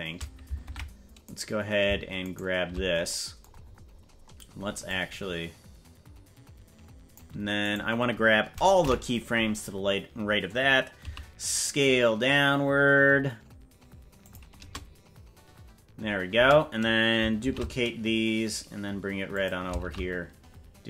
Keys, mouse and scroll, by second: 0.7 ctrl+Tab, 1.5 right click, 2.5 shift+right click, 3.7-4.5 scroll down 14, 4.7 scroll up 3, 4.9-7.2 drag, 7.7 right click, 8.9 ], 11.1 s, 14.7 space, 16.4 space, 17.4 shift+d, 19.8 shift+d.